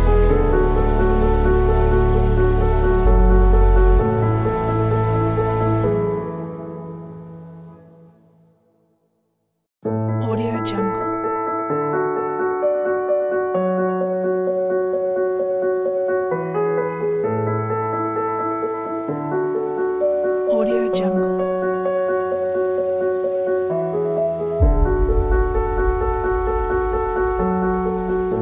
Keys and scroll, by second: 2.5 s, 11.4 space, 18.8-21.9 typing, 23.8-26.3 typing.